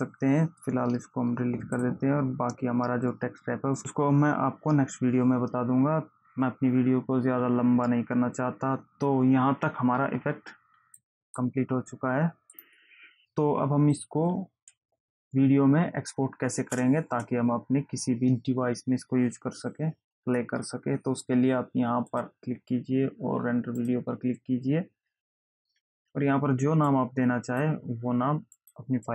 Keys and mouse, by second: 2.1 click, 11.3 click, 12.7 click, 16.9 space, 22.5 click, 24.1 click, 27.2 click, 28.9 click.